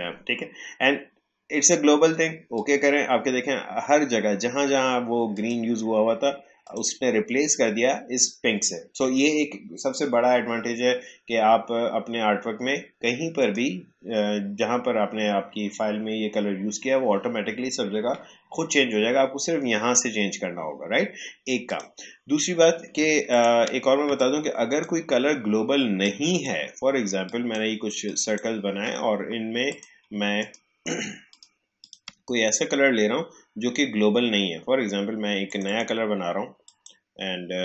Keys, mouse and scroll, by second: 0.3-1.0 typing, 2.5 click, 5.3 click, 13.3 click, 21.6 click, 24.1 shift+click, 30.3 shift+click, 35.4 click.